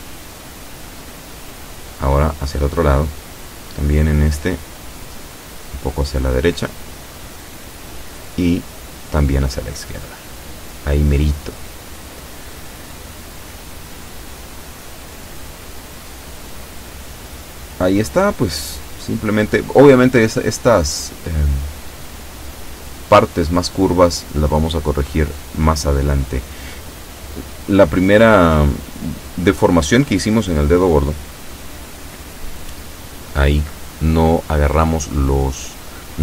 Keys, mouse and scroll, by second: 0.4 click, 1.6 click, 3.3 a, 3.9 b, 4.2 click, 5.5-6.8 drag, 6.9 a, 7.7 b, 8.1 click, 9.3-10.6 drag, 11.0 shift+middle click, 16.0-16.6 scroll up 2, 16.7 shift+middle click, 19.1 shift+middle click, 20.5 scroll down 2, 21.4 shift+middle click, 22.1-22.4 shift+scroll down 3, 22.8 shift+middle click, 23.8-24.2 shift+scroll up 3, 24.4 shift+middle click, 25.4 scroll up 1, 25.7 shift+middle click, 32.0-34.6 middle drag, 35.0 a.